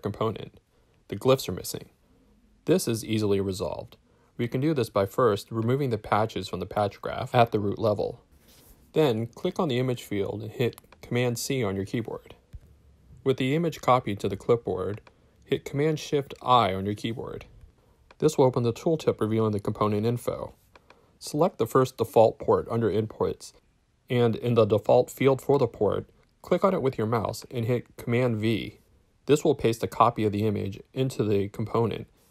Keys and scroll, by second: 4.8 BackSpace, 6.7 BackSpace, 12.5 super+c, 15.7 shift+super+i, 28.0 super+v.